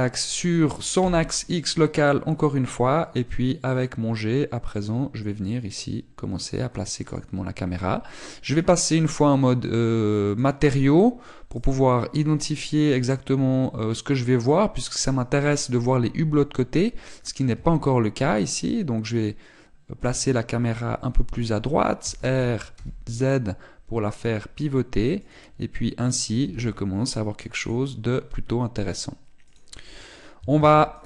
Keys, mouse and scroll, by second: 0.5 click, 1.7 g, 7.9 click, 9.2 click, 18.3 g, 20.8 click, 22.7 r, 26.0 click, 27.2 g, 28.4 click, 29.5 click.